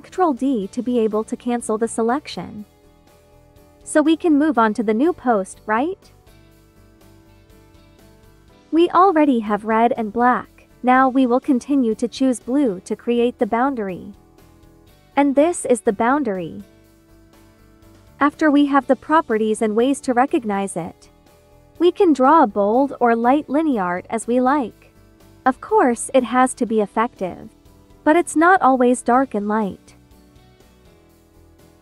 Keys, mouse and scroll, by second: 0.9 ctrl+d, 3.5 space, 3.7 click, 4.1 space, 4.6 b, 8.5-20.8 drag, 20.8 space, 21.0 click, 21.3 space, 30.8 space, 31.0 click, 31.4 space.